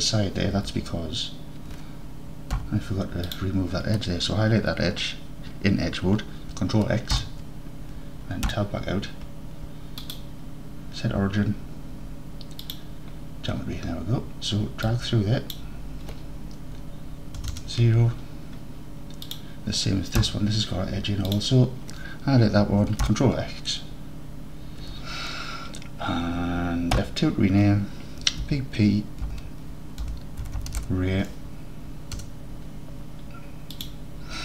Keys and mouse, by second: 0.6 Tab, 2.6 2, 3.3 click, 7.2 ctrl+x, 8.6 Tab, 10.2-12.8 drag, 15.1-18.2 drag, 19.3-20.3 drag, 20.3 Tab, 23.1 ctrl+x, 24.9 Tab, 27.0 F2, 33.8-34.4 drag.